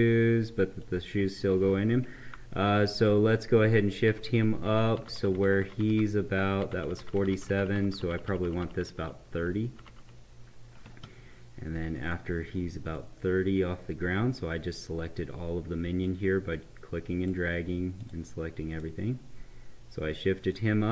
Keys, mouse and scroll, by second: 3.9 ctrl+Up, 11.9 right click, 12.9 click, 16.0-18.0 drag, 18.8-20.9 right drag.